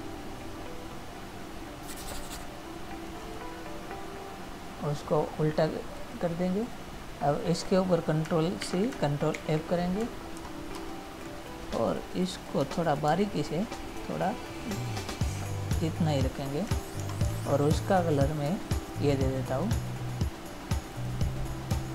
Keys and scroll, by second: 9.0 ctrl+c, 9.7 ctrl+f, 10.7 ctrl++, 17.3 ctrl+-.